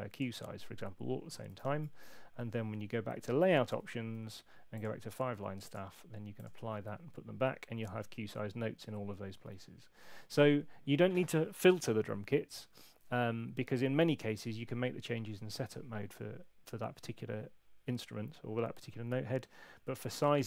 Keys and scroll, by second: 1.5 super+8, 3.3 shift+super+l.